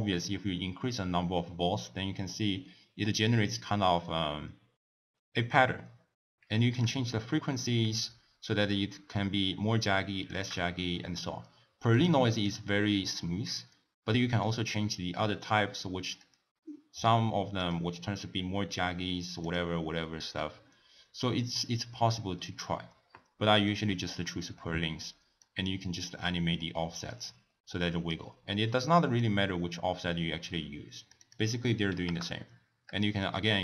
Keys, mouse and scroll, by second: 2.4-5.4 middle drag, 6.9-9.9 drag, 12.0 click, 12.4-15.4 drag, 16.2-19.2 drag, 19.5-22.5 drag, 25.5-28.5 drag, 29.3-33.6 drag.